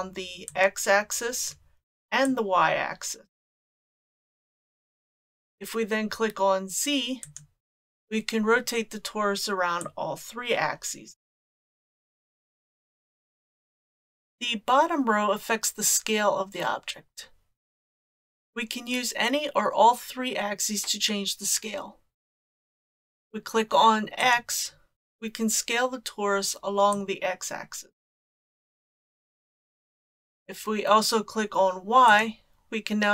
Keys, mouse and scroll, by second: 0.5-1.5 drag, 2.3 click, 7.3 click, 9.8-12.4 drag, 24.2 click, 27.0-29.1 drag, 32.1 click.